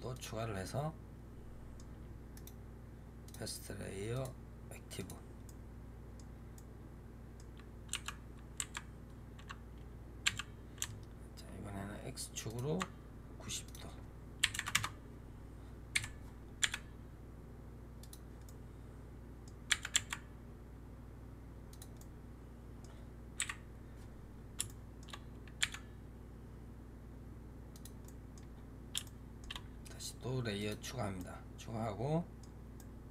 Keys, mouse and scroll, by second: 0.0 click, 0.5-2.2 middle drag, 2.2-4.0 right drag, 4.0-5.3 drag, 5.3-7.8 middle drag, 7.8 r, 13.5-15.8 drag, 15.8 KP_7, 16.5 g, 18.3-19.6 middle drag, 19.6 g, 21.9-23.3 middle drag, 23.3 KP_1, 24.2-24.5 scroll up 3, 24.5-25.0 shift+middle drag, 25.0 scroll up 2, 25.5 g, 27.9-28.4 middle drag, 28.4-28.9 scroll down 5, 28.9-30.5 shift+middle drag, 30.5 click, 31.1-33.1 middle drag.